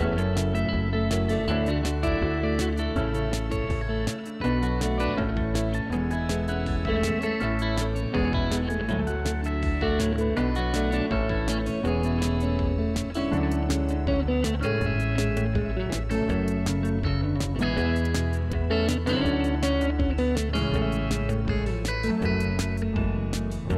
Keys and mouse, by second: 0.5 click, 0.8 ctrl+1, 1.0 click, 4.8 click, 5.0 ctrl+q, 5.1 click, 5.9 alt+y, 6.2 ctrl+1, 6.3 click, 6.7 Delete, 7.1 ctrl+q, 7.3 click, 9.7 alt+y, 9.9 click, 10.9 ctrl+w, 11.1 click, 11.9 click, 12.3 click, 15.1 ctrl+x, 15.3 click, 17.5 y, 17.6 click, 19.8 ctrl+1, 19.9 click, 22.5 ctrl+shift+x, 22.6 click, 22.9 ctrl+1, 22.9 click.